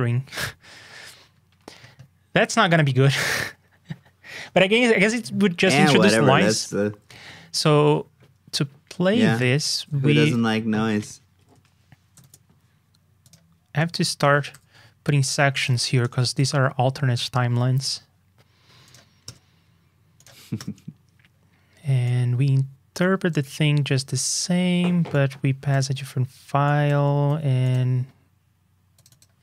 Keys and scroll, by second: 9.7 super+c, 12.1 super+v, 25.9 super+c, 27.1 super+v.